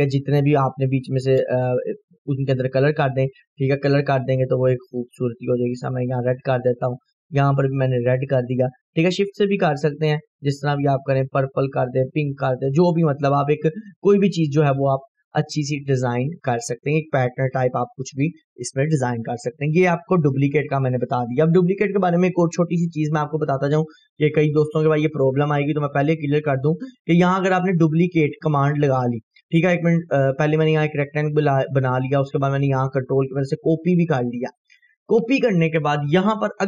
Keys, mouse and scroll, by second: 2.5-14.3 drag, 15.0 scroll up 1, 15.8-17.3 drag, 23.1 Delete, 24.1 scroll down 1, 26.9 click, 29.1 scroll up 1, 30.3 click, 32.4-35.0 ctrl+click, 34.7 ctrl+right click.